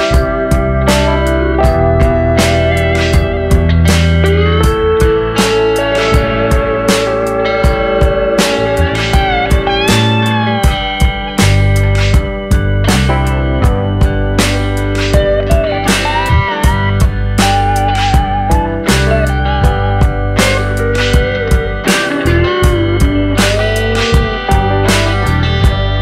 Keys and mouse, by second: 1.2 middle click, 2.0 middle click, 3.1 click, 4.0 click, 4.5 middle click, 5.3 click, 6.2-7.4 middle drag, 7.7 middle click, 8.2 shift+middle click, 8.5 middle click, 9.0 middle click, 9.4 shift+middle click, 12.9 middle click, 13.5 shift+middle click, 13.8 middle click, 14.7 middle click, 16.0 e, 17.6 click, 19.4 middle click, 19.9 shift+middle click, 20.6 shift+middle click, 22.2-23.8 drag, 23.8 middle click, 25.5 alt+click.